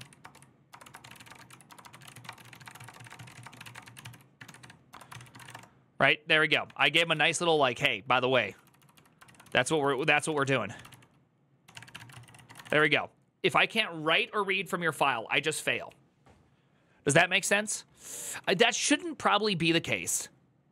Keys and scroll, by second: 0.0-5.7 typing, 6.4 ctrl+d, 6.8 ctrl+c, 6.9-12.9 typing, 7.0 Return, 18.5 w.